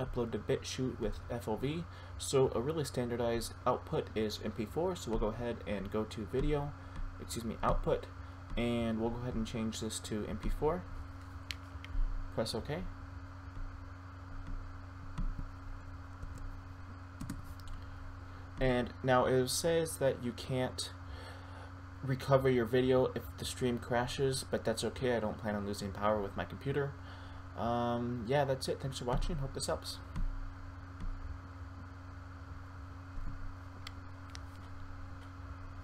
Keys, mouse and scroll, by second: 6.7 click, 16.3 Down, 17.2 Return, 30.5 click, 33.2 F9.